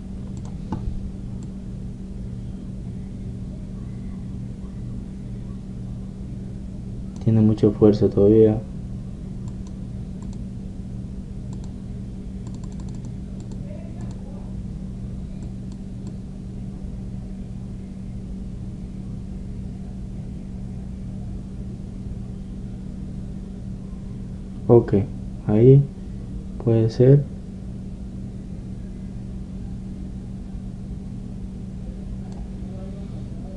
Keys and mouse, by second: 10.6-19.1 drag.